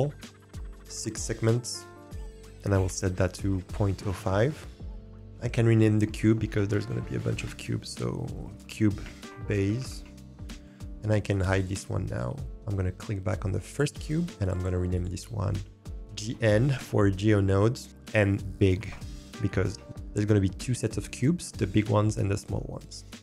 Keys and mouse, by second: 2.3-3.9 drag, 4.8-9.2 drag, 9.3 click, 11.3 click, 11.5-13.4 drag, 14.5-19.6 drag.